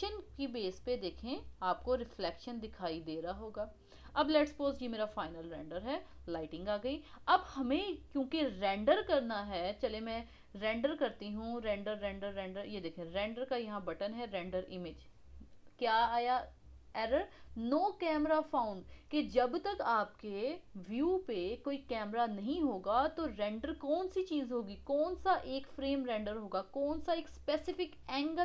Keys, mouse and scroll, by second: 2.2-3.1 middle drag, 3.1-3.4 scroll up 1, 3.4-6.6 middle drag, 6.6-8.2 scroll up 1, 13.3-16.5 drag.